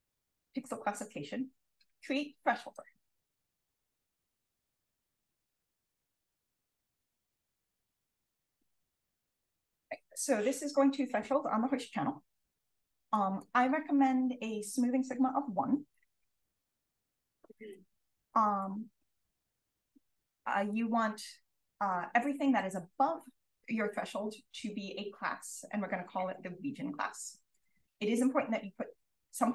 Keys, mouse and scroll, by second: 13.1 click, 16.7 1, 19.2 click, 20.7 click, 25.4 click, 27.5 click.